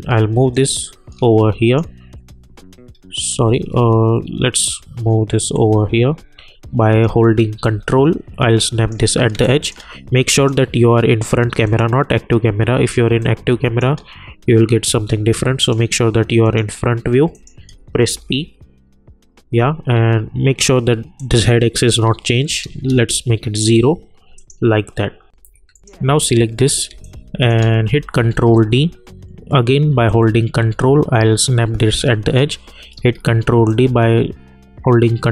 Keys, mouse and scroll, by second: 2.9 scroll up 1, 3.0-3.3 scroll down 1, 3.5 ctrl+z, 5.5-7.6 drag, 7.6-9.3 drag, 9.3 space, 9.4 click, 13.0 space, 13.2 click, 13.5 space, 15.6 click, 18.1 p, 21.1 click, 22.9 Return, 24.3 click, 26.9 space, 27.0 click, 27.4 space, 28.3 ctrl+d, 30.1-32.9 drag, 32.9 ctrl+d, 33.7-35.3 drag.